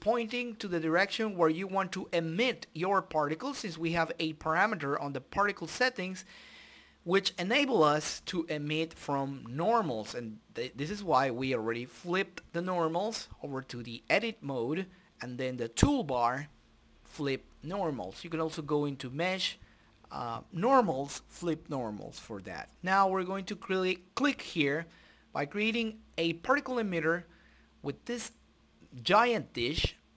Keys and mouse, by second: 0.5 a, 1.0 click, 1.8 click, 2.8-4.3 drag, 5.2 click, 6.3-7.6 drag, 8.9 t, 11.2-13.2 drag, 13.5 click, 13.9 KP_0, 14.3 BackSpace, 14.6 KP_0, 16.3-17.4 drag, 18.2 click, 19.4 click, 20.7-22.0 drag, 22.3 click, 26.0-28.5 middle drag, 29.3 click.